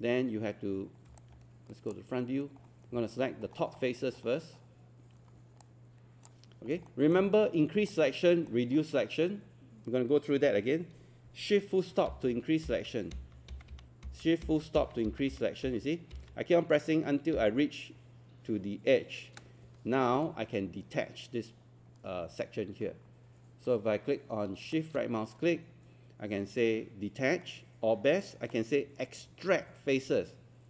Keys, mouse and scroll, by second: 1.2 click, 2.3 scroll up 1, 2.6-3.0 scroll down 1, 3.3 scroll up 1, 5.6 click, 6.7 scroll down 1, 6.9 alt+middle click, 7.2 scroll up 1, 7.9 alt+middle click, 8.8 scroll up 1, 24.7-30.6 shift+right drag.